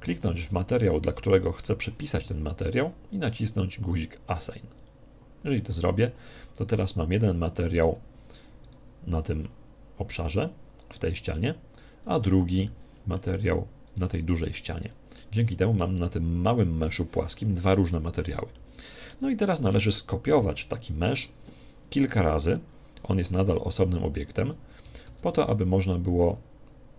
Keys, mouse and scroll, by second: 0.4 click, 2.1 z, 4.7 click, 7.2-8.6 middle drag, 8.6-10.2 right drag, 12.0-12.6 scroll down 1, 12.6-14.3 middle drag, 13.8-15.4 right drag, 14.3 Tab, 14.7-17.6 middle drag, 17.8-20.1 middle drag, 20.2 KP_1, 25.0 g, 25.0 shift+d.